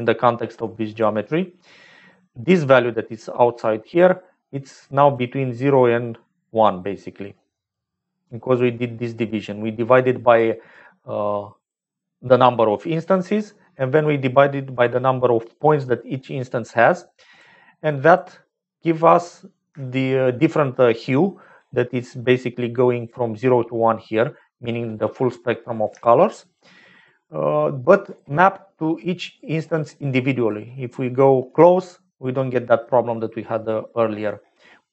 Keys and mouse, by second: 0.6 click, 6.9 click, 8.7 click, 10.2 click, 10.7-11.9 drag, 12.9 click, 15.1 click, 17.3 click, 18.0 click, 18.8 middle click, 19.8 shift+click, 22.5 click, 25.0 middle click, 26.1 shift+middle click, 27.2 middle click.